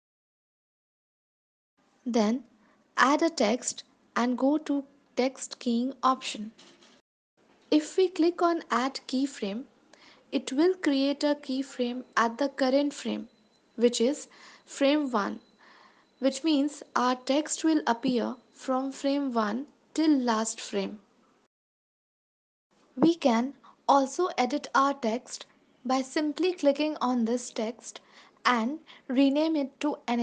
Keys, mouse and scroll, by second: 2.8 shift+a, 3.9-4.3 scroll down 4, 4.3 ctrl+s, 4.9 click, 7.4 ctrl+s, 10.6 click, 16.4 click, 16.9 space, 19.5 space, 20.3 ctrl+s, 21.1 click, 24.6 click.